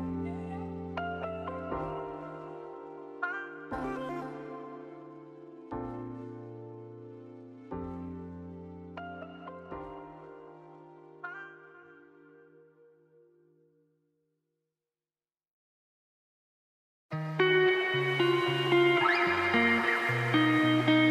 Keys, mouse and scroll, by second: 0.1 click, 1.0 right click, 1.9 ctrl+1, 2.6 click, 3.2 click, 4.6-5.7 drag, 5.8 scroll down 4, 6.4 middle click, 6.9-7.4 scroll up 3, 7.4 click, 7.5-8.6 right drag, 8.6 click, 8.9 click, 9.2-10.4 drag, 10.7 click, 12.5 scroll down 5, 12.7-14.1 shift+middle drag, 14.4 ctrl+s, 14.7-16.5 middle drag, 16.5 ctrl+s, 17.8 click, 18.0 Tab, 18.1 3, 18.2 click, 19.0 u, 19.4 Tab, 20.0 click, 21.0 l.